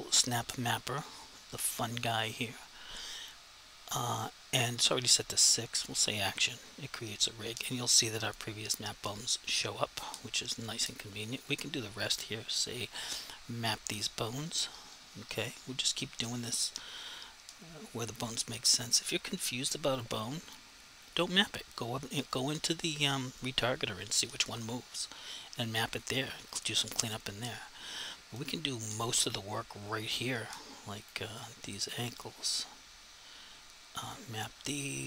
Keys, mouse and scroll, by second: 0.2 click, 5.9 click, 11.5 click, 15.7 click, 18.2 click, 26.0 click, 31.1 click.